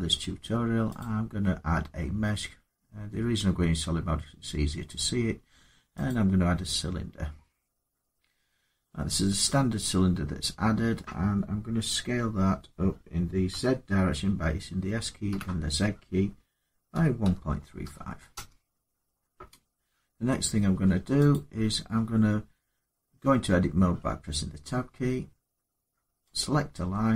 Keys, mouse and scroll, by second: 0.8 click, 5.9 click, 9.3 middle click, 9.6 scroll up 2, 13.3 s, 15.1 z, 16.7-17.6 typing, 18.1 Return, 20.5 Tab, 21.1 click, 22.8 Tab, 23.8 Tab, 26.1 click.